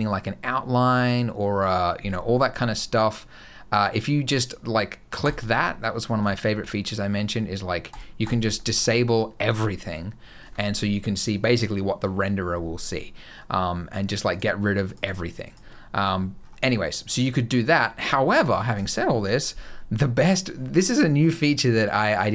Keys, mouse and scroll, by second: 5.1 click, 5.9 scroll down 1, 6.2 shift+middle click, 7.7 click, 8.4 click, 8.4-8.9 scroll up 3, 12.7 middle click, 14.2 click, 14.7 click, 14.9 click, 15.3 click.